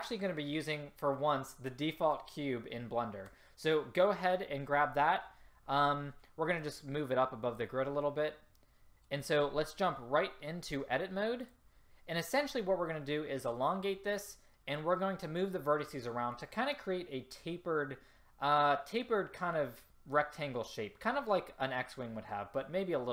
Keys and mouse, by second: 6.8-10.0 drag, 10.7-12.6 drag.